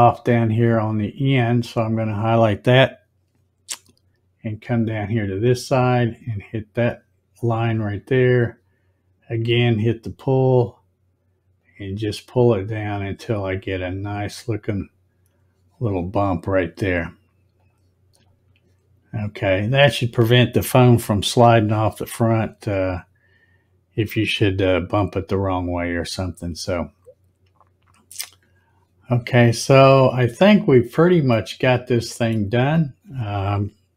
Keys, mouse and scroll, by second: 1.1 click, 6.3 ctrl+click, 9.2 click, 11.5-14.7 drag, 17.6 click, 18.1 click, 29.7 scroll up 1, 30.2 scroll up 1, 31.3-32.1 scroll up 1, 32.1 scroll up 1.